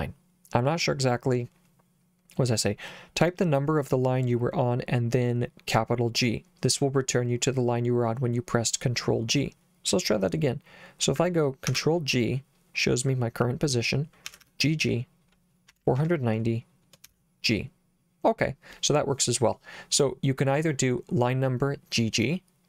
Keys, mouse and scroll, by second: 11.7 ctrl+g, 14.2 g, 14.4 g, 15.5-17.1 typing.